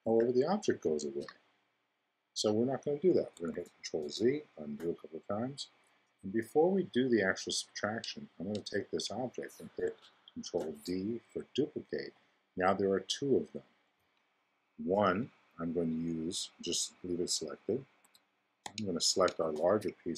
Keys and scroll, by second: 0.0 0, 1.1 2, 3.5 super+z, 10.4 super+d, 18.0 x, 18.6 shift+x.